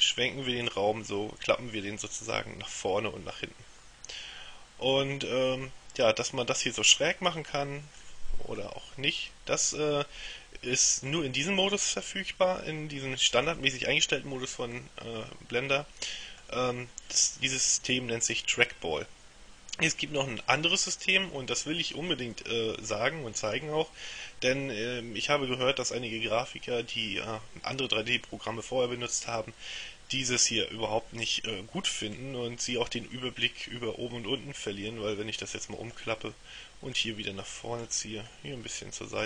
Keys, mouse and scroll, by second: 6.1-8.6 middle drag, 8.7-11.7 middle drag, 14.9-17.0 middle drag, 32.3-36.5 middle drag, 37.0-38.4 middle drag.